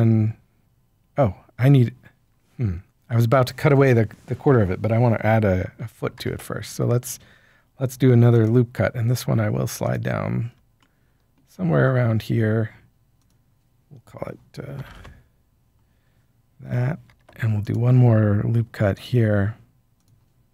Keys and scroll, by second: 6.1 ctrl+r, 14.8 typing, 14.9 Return, 17.0 ctrl+r.